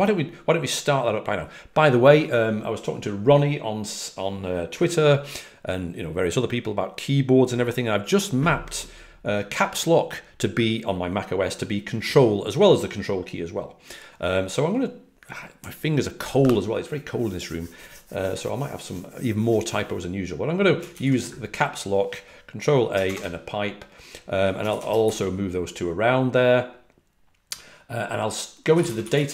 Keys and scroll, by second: 28.5-29.3 typing.